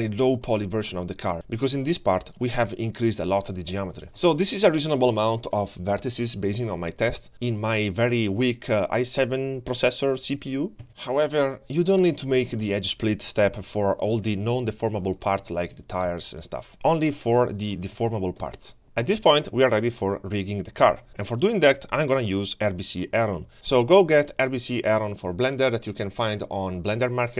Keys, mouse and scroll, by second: 0.1 middle click, 4.1 middle click, 8.7 scroll down 1, 10.9-11.2 scroll down 2, 11.2-11.8 middle drag, 12.5 click, 13.3 h, 14.1 ctrl+z, 15.1 click, 15.4 g, 16.0-16.3 middle drag, 16.4 middle drag, 16.7 scroll down 1, 16.9-17.5 scroll up 2, 17.5 middle drag, 18.0 g, 18.7 scroll down 1, 18.8 middle click, 19.5-20.2 middle drag, 20.6 scroll down 1, 20.8 middle click, 21.1-21.7 scroll down 3, 21.5 middle drag, 22.9 middle click, 23.2-23.5 scroll up 3, 23.5 middle click, 23.5 n.